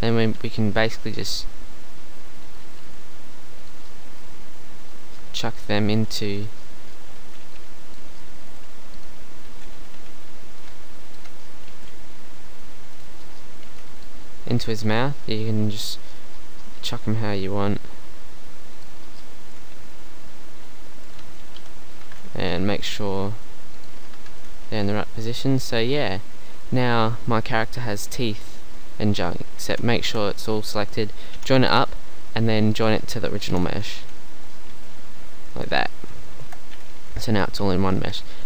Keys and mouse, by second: 1.0 g, 2.8 g, 5.9 g, 7.3 a, 7.5 b, 8.5 g, 9.6 a, 10.0 b, 11.7 g, 13.7 b, 14.9 g, 16.8 g, 18.9 click, 19.5 a, 21.3 z, 21.6 KP_3, 22.1 ctrl+z, 22.8 g, 23.9-24.9 drag, 24.3 z, 24.7 a, 29.7 ctrl+z, 31.4 ctrl+j, 33.5 ctrl+j, 33.9 z, 36.5 Tab, 36.9 a, 37.1 a, 37.3 Tab.